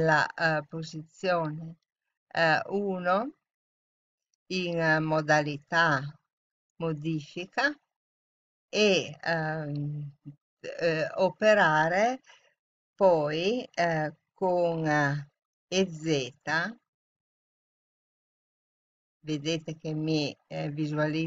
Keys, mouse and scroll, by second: 5.2-7.0 drag, 16.6 e.